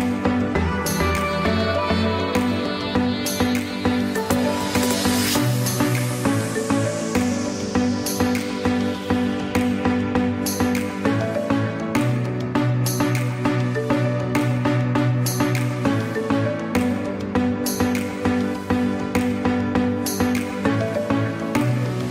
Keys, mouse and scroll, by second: 1.0 z, 1.7 click, 4.7 click, 6.5 click, 7.8 space, 8.0 click, 8.4 space, 10.5 click, 10.8 space, 11.0 click, 11.3 space, 11.6 click, 13.2 space, 13.4 click, 13.8 space, 14.9 ctrl+e, 19.0 click.